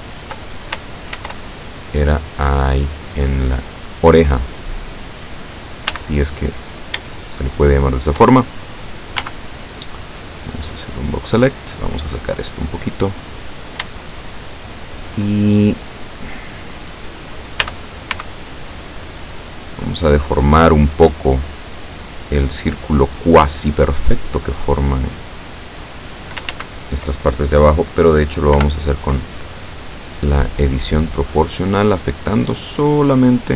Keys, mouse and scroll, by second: 1.2 ctrl+r, 2.6 click, 4.5 click, 5.9 a, 6.4-6.9 scroll up 1, 7.2-8.3 shift+drag, 9.3 b, 10.0-11.2 drag, 11.6-13.4 drag, 14.0-15.2 shift+drag, 17.7 a, 18.2 b, 19.7-21.0 drag, 21.4-26.5 drag, 26.6 ctrl+z, 28.7 o, 30.3 click, 31.0-31.4 scroll up 1, 31.5-33.1 scroll up 4, 33.3-33.5 scroll up 1.